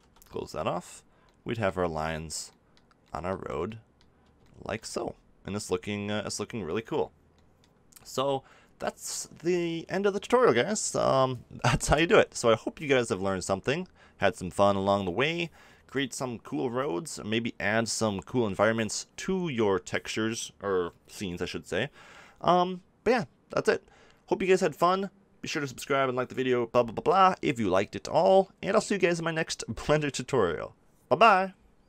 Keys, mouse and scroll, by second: 0.0 t, 10.3 middle click, 10.7-14.7 middle drag.